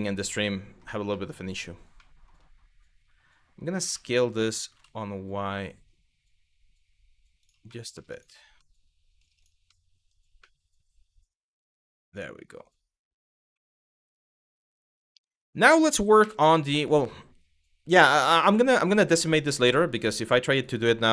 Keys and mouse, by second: 0.8-1.1 middle drag, 1.7 middle click, 3.5 s, 4.3 y, 7.1 click, 7.3 middle drag, 8.3-8.8 middle drag, 9.4-9.8 middle drag, 10.2-12.3 middle drag, 13.2-14.4 middle drag, 14.9-15.4 middle drag, 15.8 KP_1.